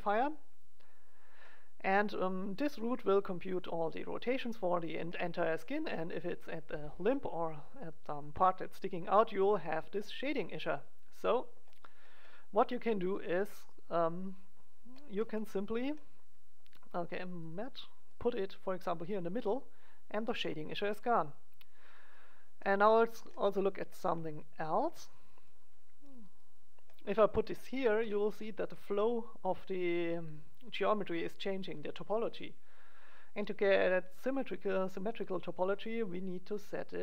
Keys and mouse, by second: 1.6-5.4 middle drag, 11.8 middle click, 14.2-15.5 drag, 16.0 middle click, 17.4-19.3 drag, 18.0 right click, 19.0 middle click, 19.3 right click, 19.4 click, 19.6-21.1 middle drag, 22.1-24.0 middle drag, 25.4 click, 25.7 right click, 26.3-28.3 middle drag, 33.3 right click.